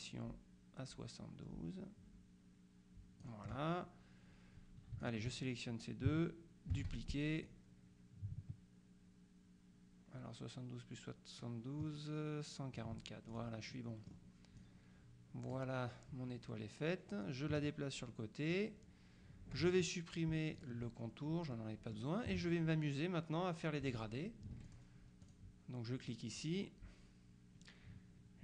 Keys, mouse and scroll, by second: 5.1 shift+click, 6.8 ctrl+d, 7.5-13.3 drag, 13.4 ctrl+click, 17.3-19.1 drag, 20.6 shift+click, 21.6 middle click, 24.6 F2, 24.7 click.